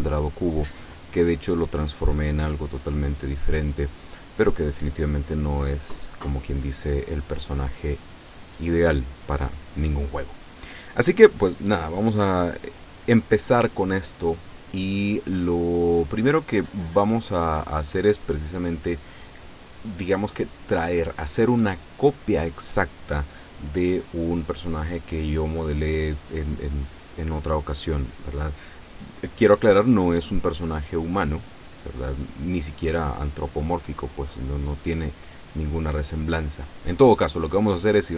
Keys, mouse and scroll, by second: 31.4 click.